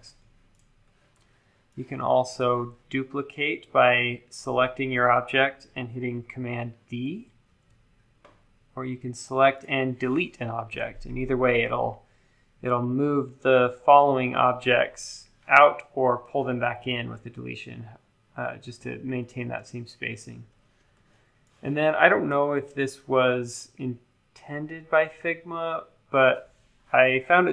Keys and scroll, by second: 7.4 super+d, 10.7 BackSpace.